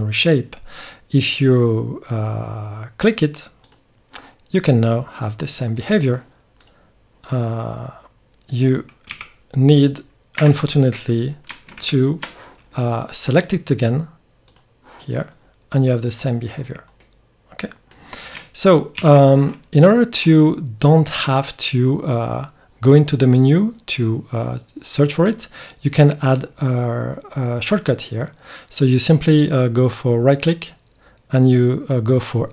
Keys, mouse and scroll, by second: 6.6 click, 6.8-8.3 right drag, 8.3 click, 9.1 e, 11.8 ctrl+z, 13.3-15.2 drag, 17.0 click, 17.8-19.0 drag, 19.0 ctrl+z, 19.8-21.1 drag, 21.1-22.2 middle drag, 22.2 drag, 22.5-23.2 drag.